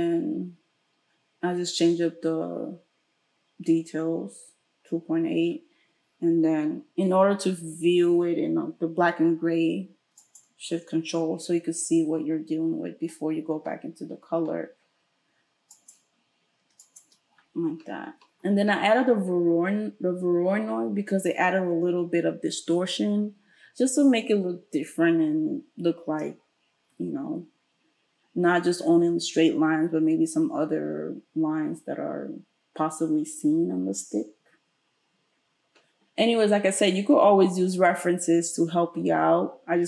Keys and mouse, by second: 10.4-15.7 ctrl+shift+middle drag, 15.7 ctrl+shift+click, 15.9 ctrl+shift+middle click, 16.8 ctrl+shift+click, 17.0-39.8 ctrl+shift+middle drag.